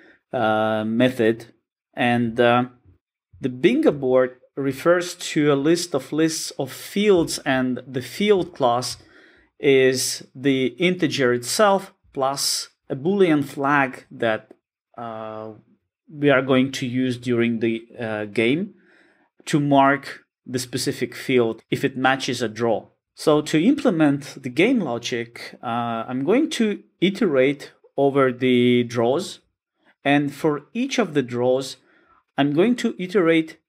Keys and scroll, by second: 2.9 alt+super+[, 3.9 super+b, 8.9 super+b.